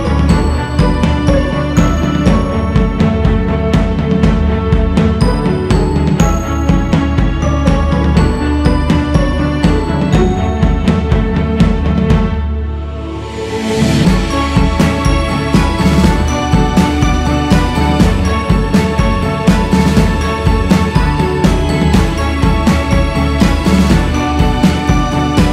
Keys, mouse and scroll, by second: 1.5-2.2 scroll down 3, 2.6 click, 3.5 scroll up 2, 4.3 g, 4.6 f, 5.7-7.1 drag, 7.1-7.4 scroll up 2, 8.1-13.2 drag, 13.2 f, 14.5-16.3 drag, 16.3-16.9 scroll down 4, 17.4 click, 18.1-18.6 scroll up 4, 19.2 f, 22.5-25.5 drag.